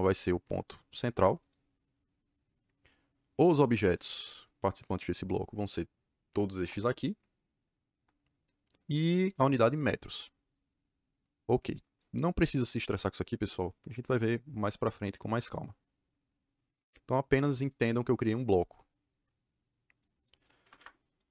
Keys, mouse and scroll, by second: 1.3 click, 3.2 click, 3.8 click, 4.6 click, 6.5 Return, 11.9 click, 17.3 click, 17.6 click, 19.0 Escape, 20.5 Escape, 20.7 Escape.